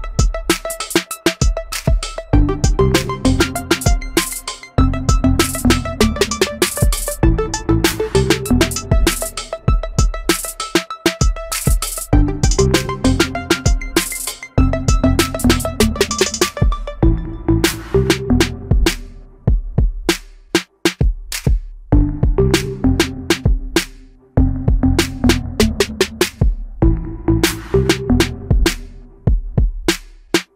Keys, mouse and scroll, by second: 1.2 m, 5.1 s, 7.6-8.3 typing, 9.9 shift+middle click, 12.2 space, 13.6 shift+middle click, 27.0 Delete.